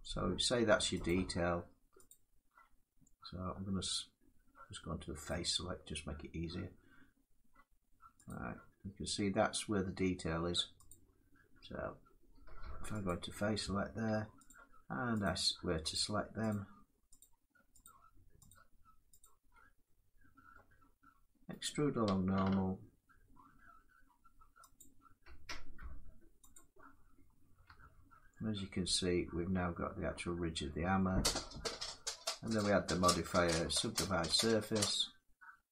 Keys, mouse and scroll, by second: 0.7 click, 1.8 shift+click, 5.2-10.1 shift+drag, 12.7 click, 14.2 shift+click, 14.9 shift+click, 15.7 click, 16.2 click, 16.9 click, 17.5 click, 18.8 shift+click, 18.9 shift+click, 20.2 middle click, 21.3 right click, 24.5 click, 26.1 click, 26.2 click, 27.3 Tab, 31.2 middle click, 32.2 click.